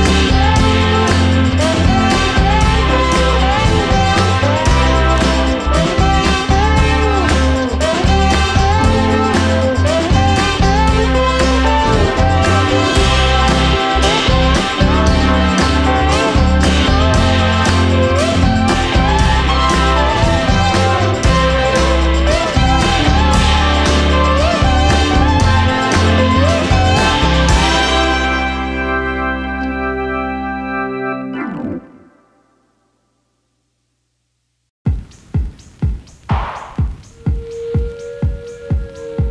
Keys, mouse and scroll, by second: 0.3-0.9 scroll down 1, 0.9-3.5 middle drag, 4.3-6.3 drag, 6.4-7.7 middle drag, 7.7 KP_0, 9.1-10.4 scroll up 1, 11.3 click, 12.1-12.4 scroll down 1, 12.4 click, 13.9 click, 14.6-18.1 drag, 20.4-20.8 scroll up 2, 21.1 click, 22.4 click, 23.2-25.0 drag, 30.8 click, 32.8 click, 33.7 click, 36.5-38.5 drag, 38.9-39.3 scroll down 1.